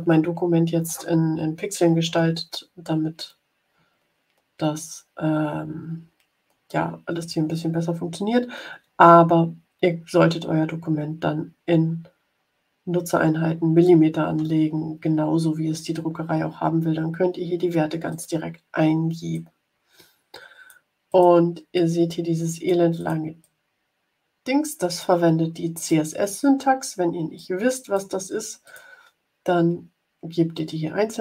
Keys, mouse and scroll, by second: 18.0 click, 19.3-20.8 drag, 21.0 click, 21.6-22.8 drag, 22.9 click, 23.3-25.1 drag, 25.7 click, 27.3 click, 28.6 click.